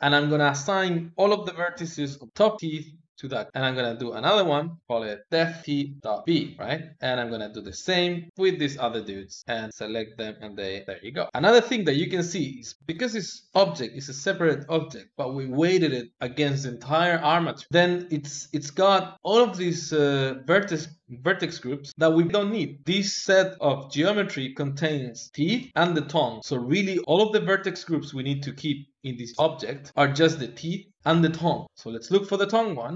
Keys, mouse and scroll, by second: 2.2-3.5 drag, 4.0 click, 4.9 click, 5.6 e, 7.5 a, 7.9 a, 8.3 l, 10.2-12.0 drag, 18.6-21.0 drag, 32.7 click.